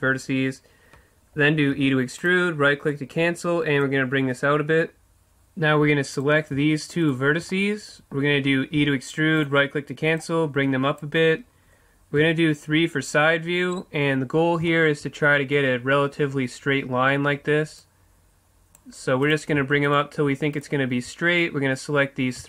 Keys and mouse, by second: 1.7 e, 2.3 click, 3.9-4.9 middle drag, 4.9 click, 6.1-7.7 right drag, 7.7-8.7 middle drag, 8.7 right click, 8.9 e, 9.5 right click, 10.2-11.2 drag, 11.2 right click, 11.8 click, 12.2 KP_3, 13.6-18.0 middle drag, 18.0-19.3 drag, 19.6-22.4 right drag.